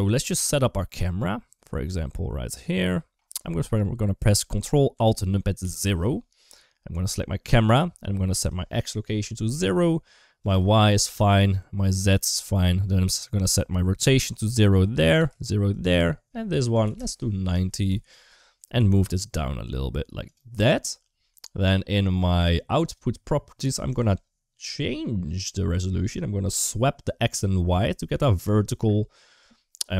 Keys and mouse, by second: 2.0-3.0 middle drag, 5.4 ctrl+alt+KP_0, 8.2-9.4 drag, 10.4 click, 14.0 click, 14.8 click, 15.6-16.8 drag, 18.4 g, 22.7 click, 23.7-29.9 drag.